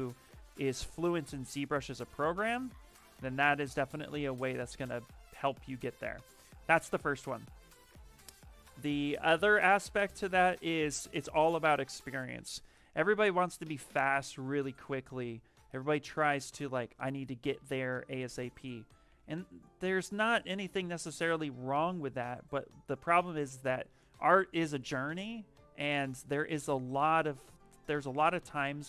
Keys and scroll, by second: 5.2 s, 14.8 s, 17.4 ctrl+z, 18.7-19.7 typing.